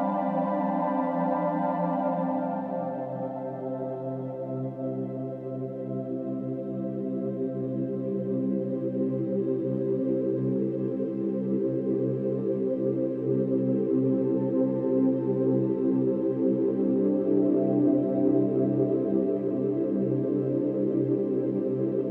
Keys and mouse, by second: 0.0 Tab, 2.6-6.5 ctrl+alt+drag, 7.9 click, 9.6 click, 10.6 click, 12.3 click, 16.0 click, 17.4 Delete, 18.0 click, 18.8 middle click, 20.5 click, 21.1-21.4 drag, 21.6-22.1 drag.